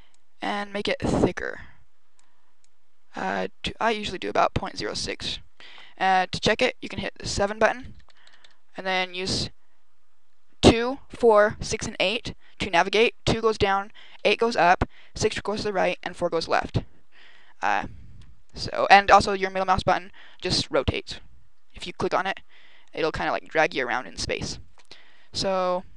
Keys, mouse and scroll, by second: 0.0 click, 2.4 click, 5.9 KP_7, 6.7-7.1 scroll up 4, 7.6-8.9 typing, 13.2 KP_2, 14.1 KP_8, 15.0 KP_6, 15.9 KP_4, 18.3-18.9 scroll down 2, 18.9 middle click, 21.9 middle click.